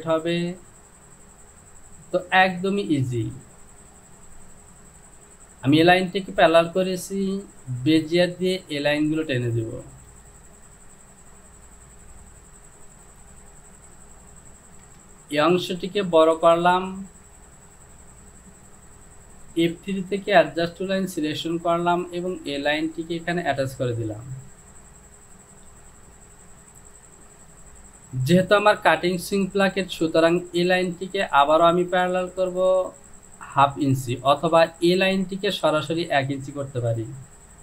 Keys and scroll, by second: 15.0 Return, 25.9 Home.